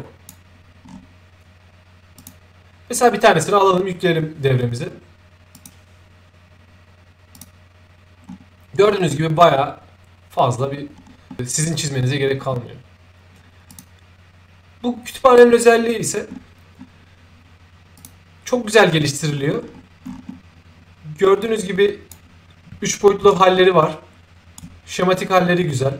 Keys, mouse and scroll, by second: 0.8 scroll up 2, 2.2 click, 5.5 click, 7.3 click, 8.3-8.7 scroll down 2, 8.7-9.6 scroll up 2, 9.6-10.6 scroll up 1, 10.6-11.3 scroll down 2, 12.1-12.6 scroll down 1, 13.7 click, 16.3-16.7 scroll down 1, 16.7-17.1 scroll up 1, 18.0 click, 19.3 middle click, 19.3-19.7 scroll down 2, 20.3 middle click, 20.3 scroll down 2, 21.4-22.1 drag, 23.3-24.6 shift+right drag.